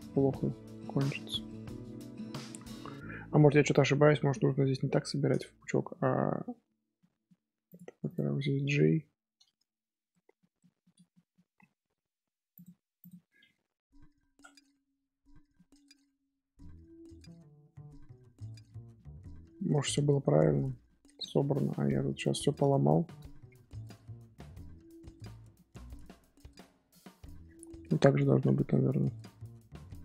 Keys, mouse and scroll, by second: 0.1 scroll down 1, 0.2-1.4 scroll up 2, 1.4 middle click, 2.4-3.3 scroll up 2, 5.4 right click, 6.2 scroll up 1, 6.6 right click, 6.6 scroll down 2, 6.9 middle click, 7.5 right click, 7.5 1, 7.6 click, 8.0 shift+click, 9.1 j, 10.1-11.1 middle drag, 11.1 scroll up 1, 11.3-11.8 shift+middle drag, 11.8 Tab, 11.9-12.5 scroll up 1, 12.5 click, 13.0 shift+click, 14.1 j, 14.6 scroll down 1, 14.6 scroll up 1, 15.0 Tab, 15.2 scroll down 2, 15.5-16.7 middle drag, 16.7 Tab, 18.6-20.1 shift+middle drag, 20.1 scroll down 1, 20.4-21.5 middle drag, 21.5 scroll down 2, 21.5 scroll up 1, 21.7 scroll down 1, 21.7 shift+middle click, 22.4 scroll up 1, 22.6 scroll down 2, 22.9 shift+middle click, 23.2 scroll up 1, 23.6 Tab, 23.9 scroll up 2, 24.8 scroll down 1, 25.0 Tab, 25.5 shift+middle click, 26.2 scroll down 1, 26.9-30.0 shift+middle drag.